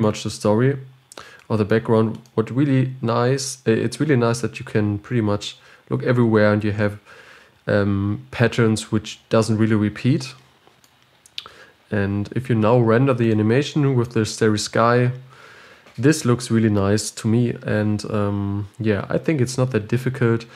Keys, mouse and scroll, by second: 2.8-6.3 middle drag, 13.7-20.5 middle drag.